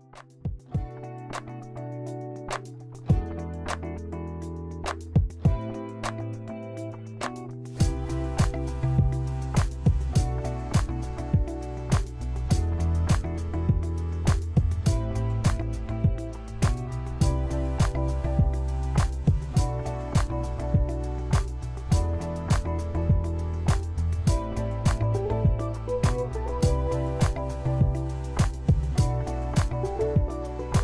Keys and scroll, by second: 1.9 ctrl+w, 2.1 s, 3.6-5.3 typing, 6.2 Page_Down, 6.3 Page_Down, 6.9 Page_Down, 7.0 Page_Down, 7.0 Page_Down, 7.1 Page_Down, 7.3 Page_Down, 8.8 Return, 10.8 ctrl+t, 14.1-16.7 typing, 22.3-27.0 typing, 28.0-30.8 typing.